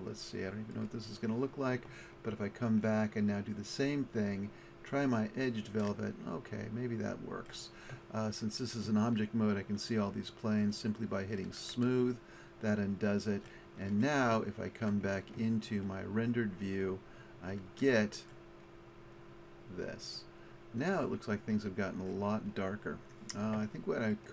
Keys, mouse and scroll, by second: 0.1 click, 1.7-3.4 middle drag, 3.4 click, 5.9-6.5 middle drag, 9.2 middle click, 10.7 click, 11.6-13.5 middle drag, 13.9-15.7 middle drag, 16.7 click, 24.2 right click.